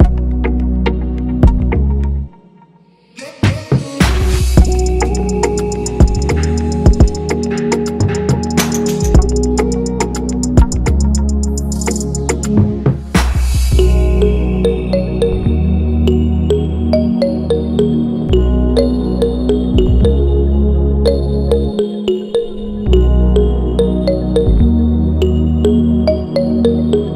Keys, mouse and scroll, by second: 3.5 shift+click, 4.6-5.1 Right, 9.8 right click, 16.0 right click, 23.6 Up.